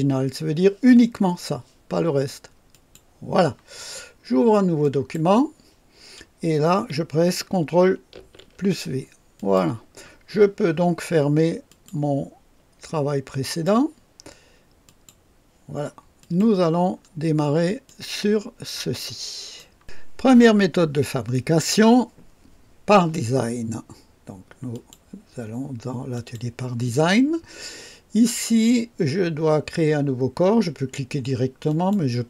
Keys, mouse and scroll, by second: 2.7 click, 4.8 click, 8.1 ctrl+v, 8.2 ctrl+v, 9.3 click, 11.7 click, 13.4 click, 14.8 click, 16.2 click, 16.9-17.6 scroll up 2, 17.8-19.7 drag, 24.7 click, 26.1 click, 31.7 click.